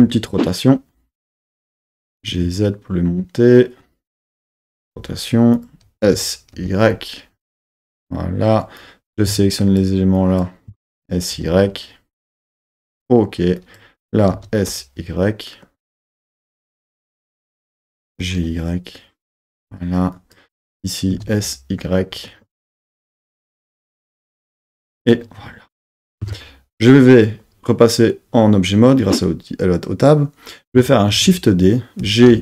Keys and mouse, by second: 1.7 click, 2.1 g, 2.3 z, 4.1 click, 4.9 r, 5.5 click, 6.0 s, 6.6 y, 8.0 click, 8.8 click, 9.6 shift+click, 10.9 s, 11.3 y, 12.9 click, 13.6 click, 14.3 s, 14.7 y, 17.5 click, 18.1 g, 18.4 y, 19.3 click, 20.1 click, 21.1 s, 21.5 y, 24.9-26.2 drag, 26.2 Tab, 31.1 shift+d, 32.0 g, 32.3 y.